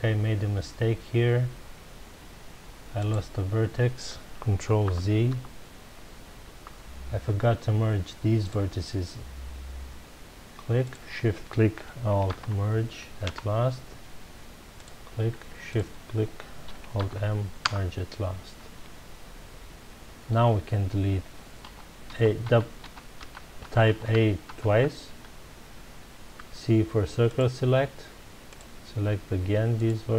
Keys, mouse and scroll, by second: 3.0 click, 4.8 ctrl+z, 8.4 click, 10.8 shift+click, 12.3 alt+m, 13.3 Return, 14.7 click, 15.7 shift+click, 17.0 alt+m, 17.7 Return, 21.6 a, 24.7 a, 26.3 c.